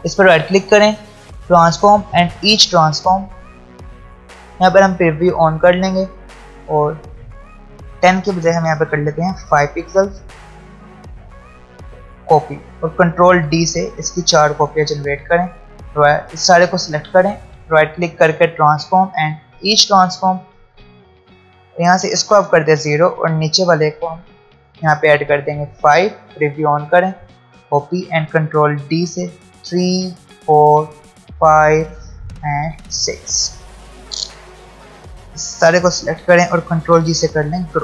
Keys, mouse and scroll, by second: 0.0 ctrl+z, 0.1 right click, 1.5 click, 4.9 click, 10.0 click, 13.1 ctrl+d, 14.7 click, 17.5 right click, 18.4 click, 23.2 click, 26.2 click, 28.8 ctrl+d, 33.5 alt+scroll down 1, 34.2 space, 34.3 click, 34.7 space, 35.1 click, 36.9 ctrl+g.